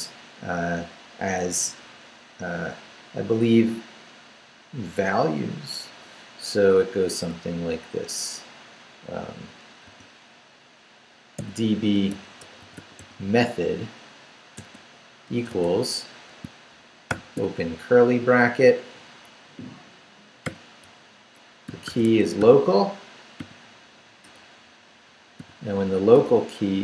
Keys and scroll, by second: 9.9 d, 11.4-13.5 typing, 14.5 space, 15.3 =, 16.4 shift+space, 17.1 shift+[, 20.4-22.9 typing, 24.2 BackSpace, 25.4 |, 26.1 BackSpace.